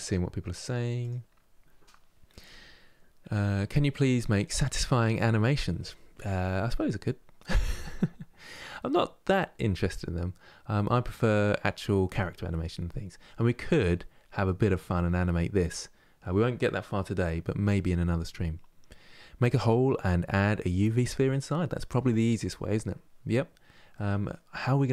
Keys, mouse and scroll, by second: 13.8 scroll down 2, 14.7-15.3 scroll down 2, 15.3-18.7 scroll up 2, 23.6-24.9 middle drag.